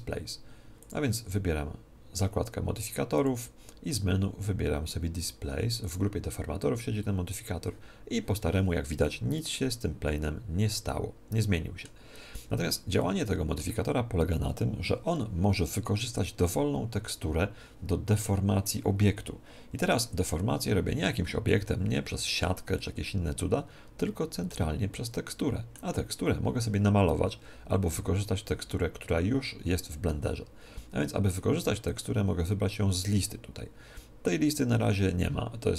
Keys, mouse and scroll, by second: 0.8-2.7 drag, 3.1-5.0 drag, 9.0-10.7 middle drag, 12.9-14.8 middle drag, 22.7-24.5 middle drag, 24.9-27.3 middle drag, 31.8-33.8 drag.